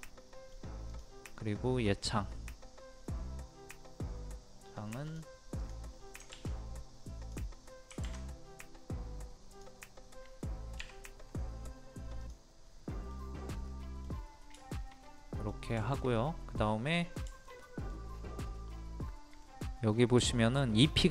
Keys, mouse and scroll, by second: 0.0 middle click, 0.9 click, 1.3-2.3 middle drag, 5.0 click, 7.2 click, 9.5 click, 10.8 2, 12.2 click, 12.7 middle click, 14.3 scroll up 1, 14.6 shift+middle click, 15.4-15.8 scroll down 1, 15.8 shift+middle click, 18.1 scroll up 1, 19.4-21.1 middle drag.